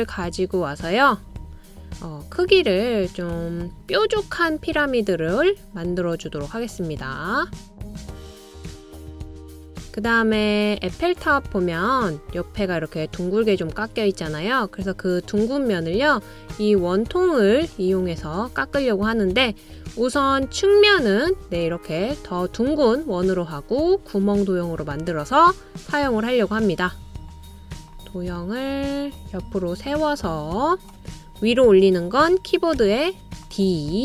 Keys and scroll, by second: 33.0 o.